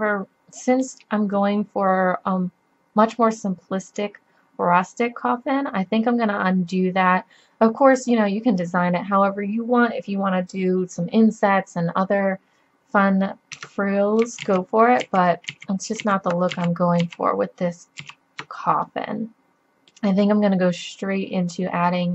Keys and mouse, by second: 0.5-1.3 middle drag, 6.9-9.1 middle drag, 13.6 Tab, 14.5 ctrl+z, 15.0 ctrl+z, 15.5 ctrl+z, 16.0 ctrl+z, 16.6 ctrl+z, 17.1 ctrl+z, 18.0 ctrl+z, 18.9-20.0 middle drag.